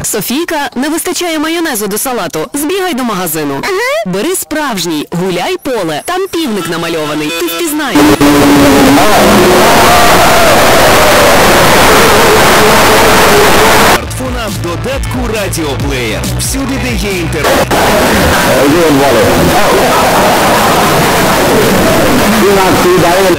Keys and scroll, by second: 0.6 Down, 0.9 Return, 14.6 Page_Down.